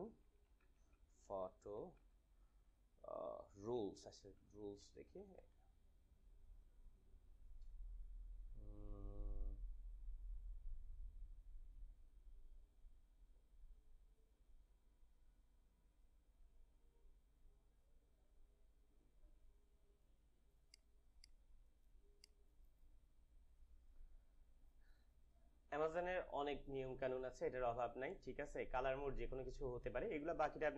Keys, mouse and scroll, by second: 0.0-2.2 typing, 3.8-5.6 typing, 9.2 scroll down 1, 10.1 scroll down 1, 11.2 scroll down 1, 12.7 scroll down 1, 14.3 scroll down 1, 16.5 scroll down 1, 18.3 scroll up 1, 20.7 right click, 21.1 click, 29.9 scroll down 1.